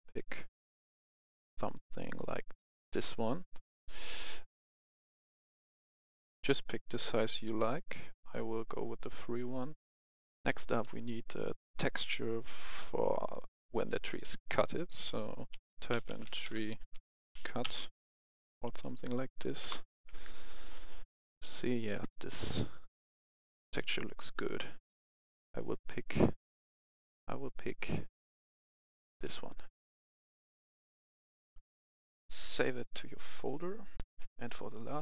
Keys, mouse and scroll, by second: 0.4-0.8 scroll up 1, 1.0-1.3 scroll down 1, 2.7 middle click, 4.8 click, 5.0 F11, 5.1 F10, 7.7 click, 10.1 F11, 10.6 F10, 10.7 click, 15.5-17.4 typing, 18.6 typing, 19.6 Return, 26.1 click, 29.3 middle click, 30.1 click, 31.8 right click, 32.7 click, 34.0 F10.